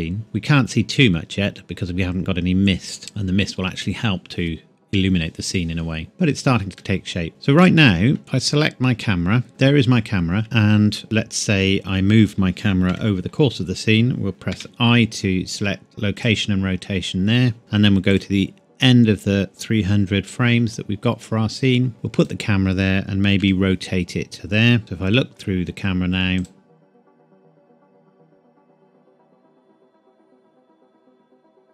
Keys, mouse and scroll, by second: 0.2-0.5 scroll up 1, 6.1 click, 6.7 middle click, 7.3 scroll down 1, 7.6 middle click, 8.2 scroll down 1, 8.4 click, 10.4 middle click, 12.8 KP_7, 14.5 i, 16.2 click, 18.0 click, 20.6 g, 22.2 click, 23.3 r, 24.3 click, 24.8 KP_0, 26.3 click.